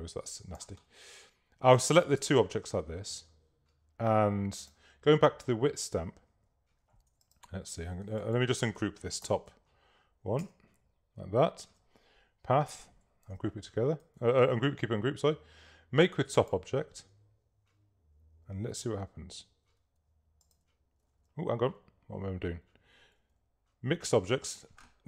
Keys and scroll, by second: 9.3 shift+super+g, 11.4 shift+super+g, 13.3 super+g, 14.2 super+z, 21.1 super+z, 22.6 super+z.